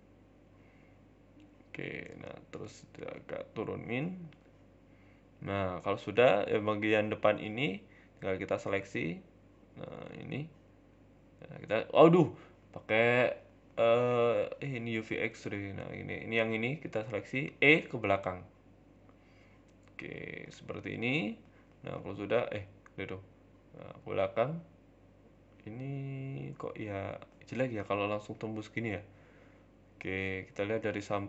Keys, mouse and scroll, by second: 1.6 s, 2.5 g, 3.7 s, 4.3 middle click, 4.9 middle click, 5.1 scroll down 1, 5.4 shift+middle click, 5.7 middle click, 6.0-6.6 scroll up 1, 6.6 ctrl+KP_3, 6.6-7.3 scroll up 3, 7.1 shift+middle click, 7.3 Tab, 8.0 right click, 8.0-8.4 scroll up 1, 8.4 shift+right click, 10.6 shift+middle click, 11.5 middle click, 12.2 middle click, 12.9 click, 13.3 ctrl+KP_3, 14.1 a, 14.2 a, 14.9 c, 16.1 middle click, 16.5-17.1 scroll down 3, 16.7 shift+middle click, 17.1 middle click, 17.5 e, 20.3 scroll down 3, 20.4 middle click, 20.9 scroll up 4, 21.1 middle click, 21.5 g, 23.0 scroll down 4, 23.1 Tab, 23.3 middle click, 24.1 scroll down 2, 24.3 middle click, 25.0-25.8 scroll up 3, 25.4 g, 26.9 middle click, 27.6 middle click, 27.8 scroll down 5, 28.0 middle click, 28.7-30.3 scroll up 7, 29.0 middle click, 30.3 KP_3, 30.9 KP_1, 31.2 scroll up 1.